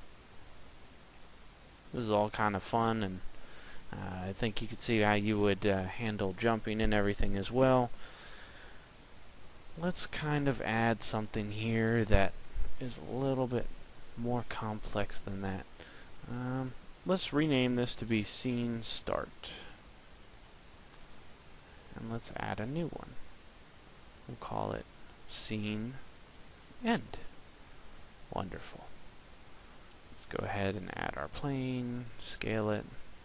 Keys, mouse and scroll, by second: 1.2 middle click, 15.5 click, 22.6 click, 29.5 shift+a, 31.7 s.